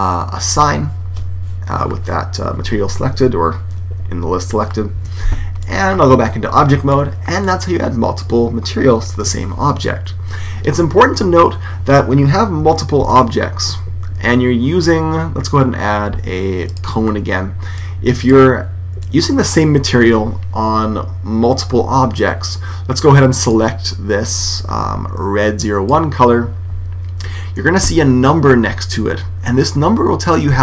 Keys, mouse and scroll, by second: 0.3 click, 4.8 Tab, 5.5 middle click, 6.3-7.7 middle drag, 8.2 middle click, 12.8 shift+a, 17.6 click, 18.9 right click, 19.5-20.8 middle drag, 23.2-24.8 drag.